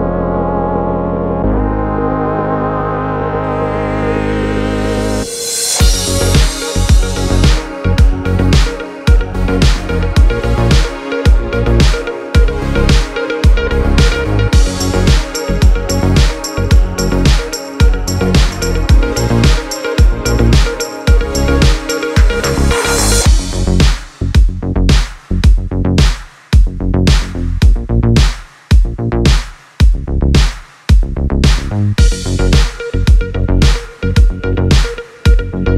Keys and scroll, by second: 4.1 Right, 4.6 Right, 4.7 Tab, 5.8 Right, 8.5 Left, 9.0 Left, 9.1 Left, 16.7 u, 28.2 -, 28.7 Return, 32.8 super+c, 33.2 super+v.